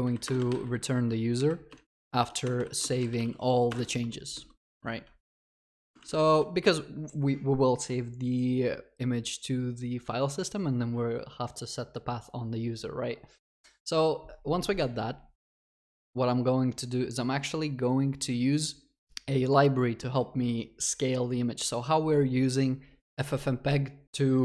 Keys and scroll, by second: 2.4 Return.